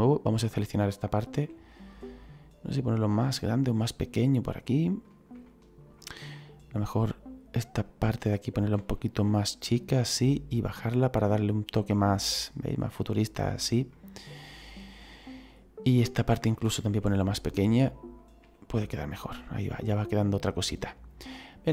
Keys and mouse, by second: 0.0 right click, 1.3 s, 4.2 click, 4.6 middle click, 5.4 shift+middle click, 7.7 right click, 8.7 s, 10.0 click, 12.7 middle click, 13.8 middle click, 15.8 right click, 16.8 s, 17.8 click, 18.3 s, 18.8 click, 19.1 middle click, 21.6 click.